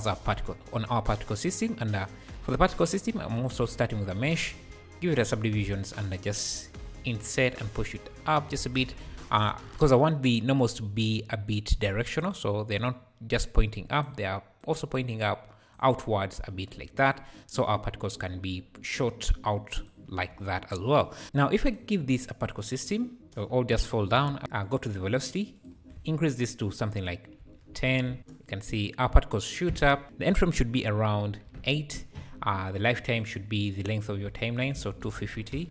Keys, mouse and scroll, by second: 4.4 ctrl+2, 5.7 Tab, 6.8 i, 7.9 alt+s, 8.7 Tab, 12.1-21.7 drag, 22.5 click, 23.2 space, 24.1 Escape, 24.6-28.2 drag, 28.2 space, 29.7 Escape, 30.0-32.9 drag, 33.0-35.6 drag.